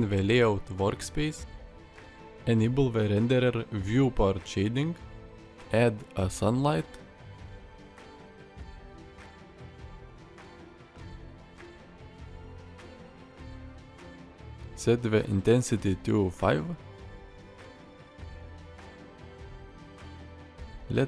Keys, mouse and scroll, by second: 5.6 shift+a, 9.5 click, 9.9 g, 11.0 r, 11.2 click, 11.5 r, 12.4 r, 13.3 click, 13.6 r, 15.0 middle click, 15.5-16.6 middle drag, 17.3 middle click, 17.9 shift+middle click, 18.2 click, 18.5 r, 20.8 drag.